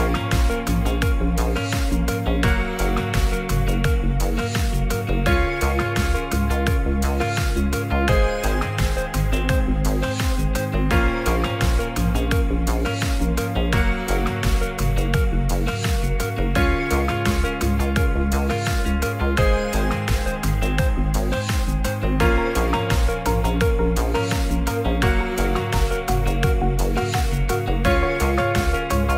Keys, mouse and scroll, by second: 0.0 z, 0.7-1.1 drag, 1.8 r, 3.0-3.4 scroll up 1, 3.4-3.9 scroll down 2, 3.7 alt+middle click, 4.5 g, 4.5 z, 6.2 click, 7.3 click, 7.5 middle click, 8.3 middle click, 8.5 s, 8.7 z, 9.8 right click, 10.0 x, 10.4 click, 10.7 s, 10.8 z, 11.9 click, 12.1 ctrl+a, 12.8 middle click, 13.4 shift+middle click, 14.5-16.1 shift+drag, 16.3 middle drag, 17.3 Tab, 18.2 c, 19.4-19.9 drag, 21.8 shift+click, 23.5 ctrl+z, 24.2 c, 24.9 c, 25.6 click.